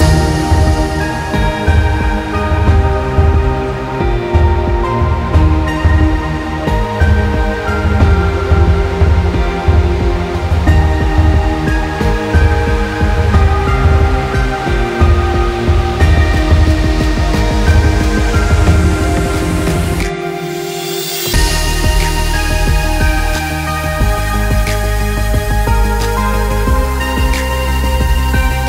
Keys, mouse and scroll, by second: 2.0 r, 3.7 middle click, 4.1 scroll up 3, 4.3 middle click, 5.0 r, 7.0 r, 11.8 scroll down 3, 12.1 middle click, 12.6 middle click, 13.3 middle click, 13.7 middle click, 14.2-15.4 scroll up 2, 14.4 middle click, 16.1 g, 17.6 g, 19.3 g, 21.4 shift+d, 22.4 g, 24.5 shift+d, 25.1 right click, 26.1 r, 28.1 g.